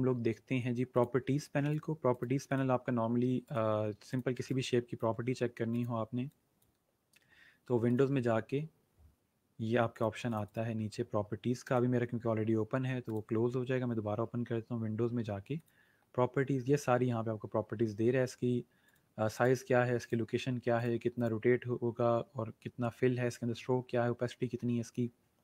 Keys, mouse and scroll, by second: 0.9 click, 3.5 right click, 4.1 click, 6.1 click, 9.9 click, 15.5 click, 18.8 click.